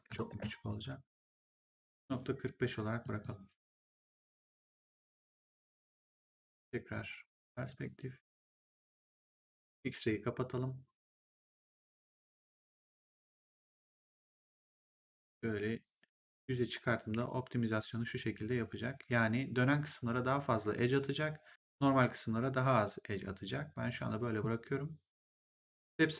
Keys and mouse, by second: 0.2 Return, 2.9 click, 3.8 BackSpace, 4.7 5, 5.2 Return, 6.9 right click, 9.6 click, 14.9 click.